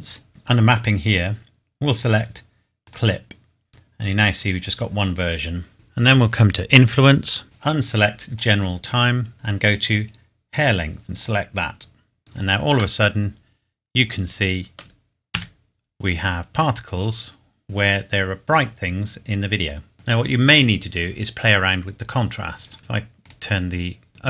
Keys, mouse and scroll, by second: 0.8-1.1 scroll up 1, 2.0 click, 3.8-5.0 scroll up 1, 5.0-5.7 scroll down 1, 5.7 click, 6.6 scroll down 1, 8.3 click, 9.3-9.8 scroll down 1, 11.2 click, 13.0 middle click, 15.3 KP_7, 16.2-17.3 scroll up 1, 18.0-18.6 scroll down 1, 18.6-19.9 scroll up 1, 20.4 scroll down 1, 23.2 click.